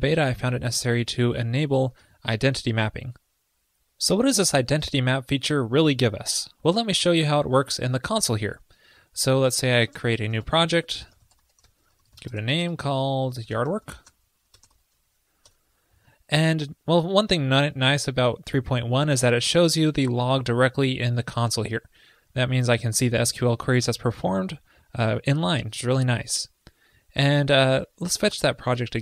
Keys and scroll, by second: 2.0 super+s.